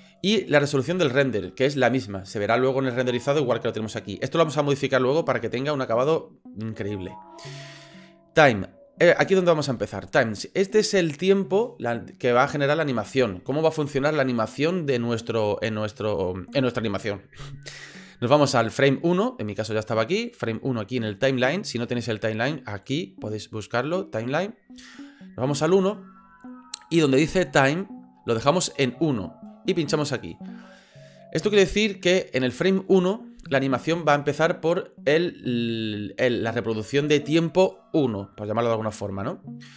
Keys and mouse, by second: 18.5-20.1 drag, 24.2 click, 30.2 click.